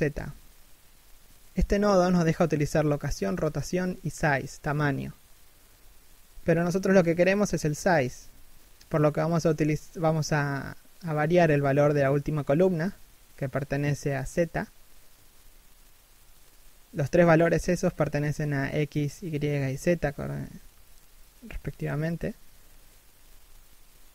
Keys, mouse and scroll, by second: 4.4 scroll up 1, 5.0 scroll down 1, 8.2 scroll up 1, 9.7 scroll down 1, 10.5 scroll up 1, 12.1 scroll down 1, 12.4 r, 16.2 scroll down 1, 17.1 middle click, 18.2 scroll up 1, 19.4-20.1 scroll down 1, 23.2 scroll up 1, 23.7 scroll down 1.